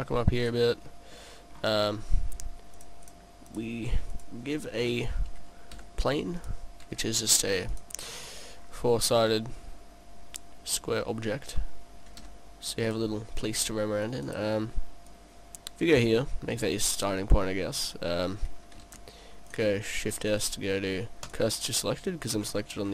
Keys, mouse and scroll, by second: 1.0 middle click, 1.5 middle click, 2.0-3.0 scroll down 1, 3.4 click, 5.9 s, 6.6 click, 7.0 s, 7.9 click, 8.1-9.0 scroll down 7, 9.1 middle click, 12.3 s, 13.1 click, 13.4-13.7 scroll down 2, 13.5 middle click, 14.3 scroll up 1, 14.5 right click, 15.2 click, 16.3 click, 17.4 middle click, 19.0 shift+s, 20.2 shift+s, 22.5-22.9 scroll up 9.